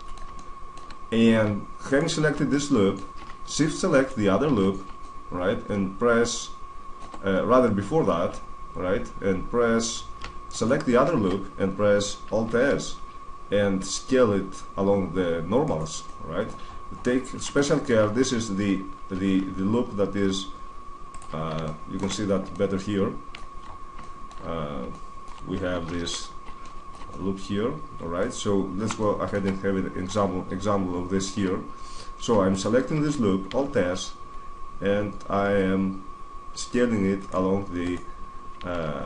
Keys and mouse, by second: 0.5 middle click, 1.7-2.7 middle drag, 2.7 right click, 3.4 middle click, 3.7 middle click, 4.2 right click, 4.8-5.9 middle drag, 6.6-10.3 middle drag, 10.3 right click, 12.2 alt+s, 15.5 right click, 15.8-20.0 middle drag, 19.0 alt+s, 20.5-22.5 drag, 22.5-25.3 middle drag, 25.5 middle click, 25.8 ctrl+z, 26.1-27.4 middle drag, 28.6-30.3 middle drag, 30.9 middle click, 32.3 right click, 33.2 alt+s, 37.1 right click, 38.5 alt+s.